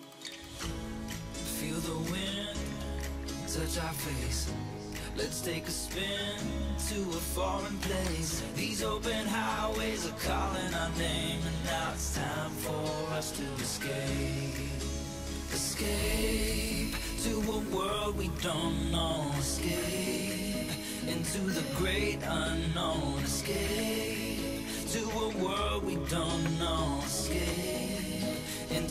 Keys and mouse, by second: 0.1 g, 1.8 middle click, 2.4 shift+middle click, 3.1 middle click, 3.6 middle click, 4.3 click, 4.5 click, 5.2 middle click, 6.3-6.7 middle drag, 6.8 shift+middle click, 7.5 g, 8.4 middle click, 8.9 click, 10.8 click, 11.4 click, 12.3-13.4 middle drag, 13.8 click, 14.7-15.7 middle drag, 17.3 click, 18.2 click, 18.5 click, 18.9 click, 19.2 middle click, 19.7-21.5 middle drag, 21.6-22.9 middle drag, 23.2 middle click, 23.9 middle click, 24.6 click, 24.9 middle click, 25.9 middle click, 27.4 click.